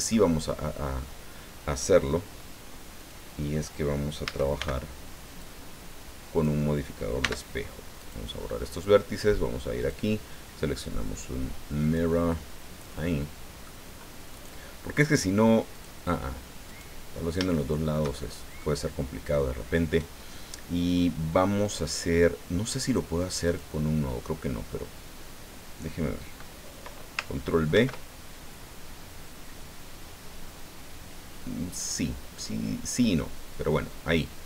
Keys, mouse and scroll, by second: 3.0 click, 4.2 a, 4.6 b, 5.4-6.6 drag, 7.2 x, 8.0 click, 9.8 click, 11.8 click, 12.5 scroll down 2, 12.8 middle click, 14.3-15.7 right drag, 15.7 click, 16.7 right click, 17.2-17.5 scroll up 3, 17.5-18.8 shift+middle drag, 19.0 scroll down 1, 23.4 click, 27.7 ctrl+b.